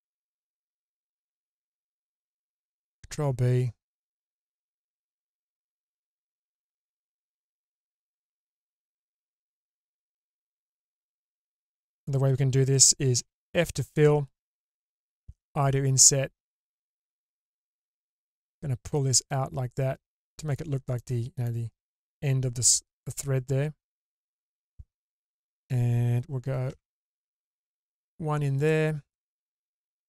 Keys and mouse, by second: 0.9 alt+click, 3.1 ctrl+b, 6.3 middle click, 7.3 middle click, 9.1 alt+click, 9.4 middle click, 10.9 middle click, 13.2 f, 15.0 i, 18.0 click, 18.0 right click, 19.0-20.6 drag, 21.0 click, 21.0 right click, 26.7 i.